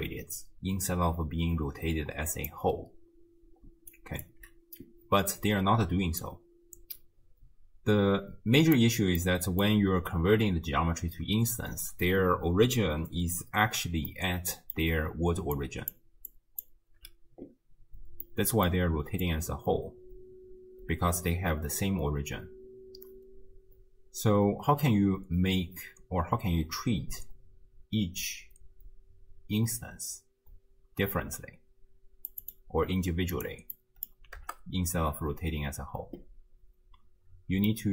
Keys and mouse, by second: 3.7 d, 4.0 click, 4.2 d, 4.3 d, 6.3-8.8 drag, 6.3 d, 9.2-9.7 middle drag, 14.2-14.8 middle drag, 14.9 d, 15.4 d, 15.5 d, 15.7 click, 15.7-17.1 d, 18.3 middle click, 19.3-32.3 drag, 32.4 click, 37.7 click, 37.7 middle click, 37.7 right click.